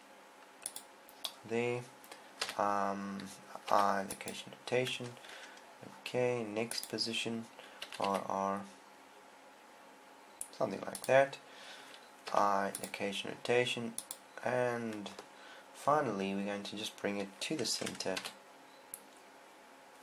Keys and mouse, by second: 1.2 click, 2.8 i, 4.2 i, 7.2-8.2 drag, 8.4 r, 11.6-13.5 drag, 12.7 i, 18.9 r.